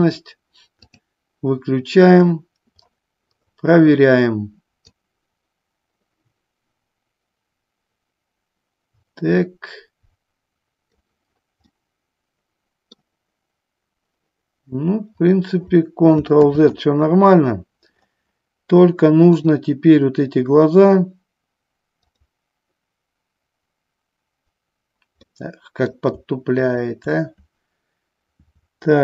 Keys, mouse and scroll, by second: 4.9-11.3 drag, 11.9-13.3 middle drag, 17.1 ctrl+z, 19.5 click, 25.5 middle click, 26.8-29.0 shift+drag.